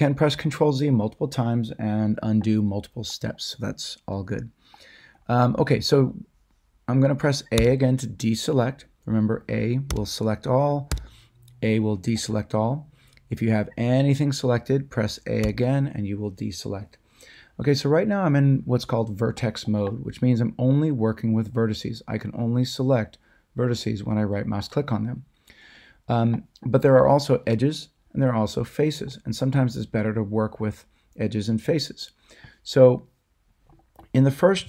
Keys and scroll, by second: 7.5 a, 9.9 a, 10.9 a, 15.4 a.